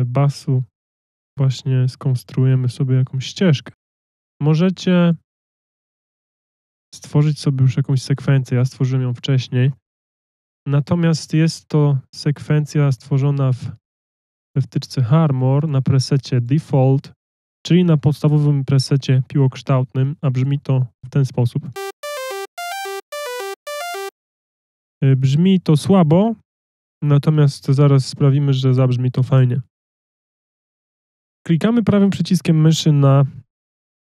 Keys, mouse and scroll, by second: 4.5 click, 10.6 F1, 10.6 click, 12.6 F1.